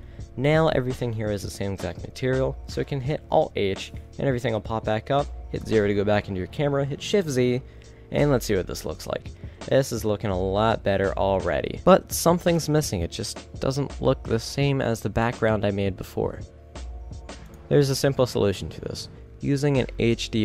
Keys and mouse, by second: 1.2 a, 3.5 alt+h, 4.6 a, 5.7 KP_0, 7.8 shift+z.